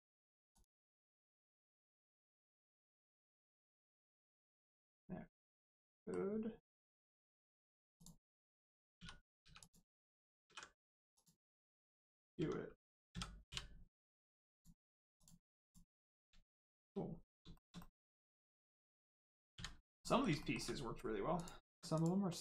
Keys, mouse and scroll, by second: 0.5 click, 1.0 middle click, 1.2 scroll down 1, 1.6 shift+middle click, 2.0 middle click, 2.0 middle click, 5.4 middle click, 7.9 click, 8.3 middle click, 8.9 2, 9.4 3, 9.6 click, 10.4 ctrl+e, 11.1 click, 11.5 scroll down 1, 11.8 Tab, 12.0 middle click, 12.3 Tab, 13.0 a, 14.5 click, 15.8-16.2 scroll up 1, 16.6 shift+middle click, 17.8 middle click, 18.6 middle click, 20.0 middle click, 20.4 shift+middle click, 21.3 middle click, 21.6 Tab, 21.9 click, 22.2 middle click.